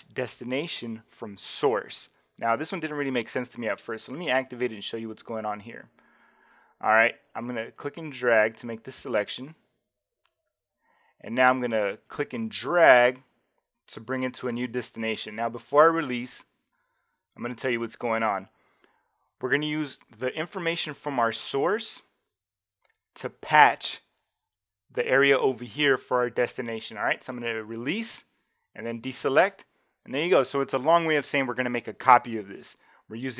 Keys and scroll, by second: 29.0 super+d.